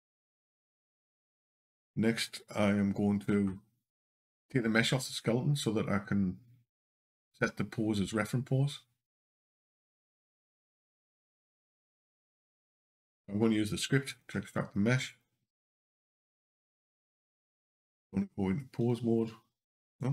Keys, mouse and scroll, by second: 9.2 scroll down 2, 13.9 click, 14.9 click.